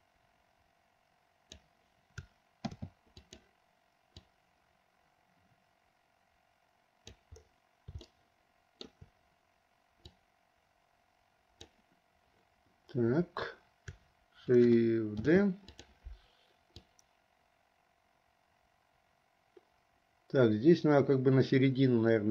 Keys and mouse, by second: 0.0-1.7 drag, 2.8 shift+d, 4.3-7.3 drag, 8.3 shift+middle click, 10.2 click, 10.8 click, 15.3 shift+d, 17.0-22.3 drag.